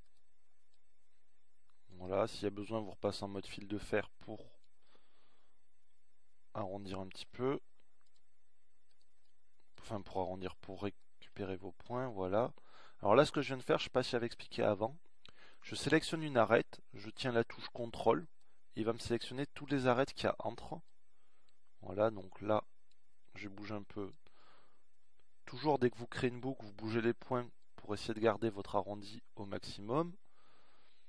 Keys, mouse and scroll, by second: 2.0 z, 9.3 middle click, 10.1-12.4 drag, 13.4-15.6 middle drag, 17.8 middle click, 19.9-21.1 middle drag, 24.7-26.6 middle drag.